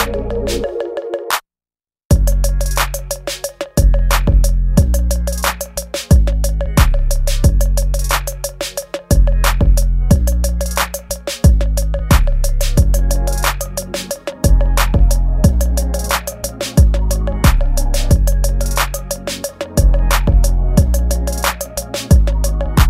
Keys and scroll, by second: 0.0 ctrl+z, 0.4 ctrl+z, 1.3 ctrl+z, 1.6 space, 2.1 ctrl+z, 4.1 space, 5.5 ctrl+z, 5.7 space, 8.2 space, 9.4 space, 9.5 ctrl+z, 10.0 ctrl+z, 10.5 space, 11.0 ctrl+z, 12.6 ctrl+z, 15.9 ctrl+z, 18.6 space, 21.4 space, 22.2 space.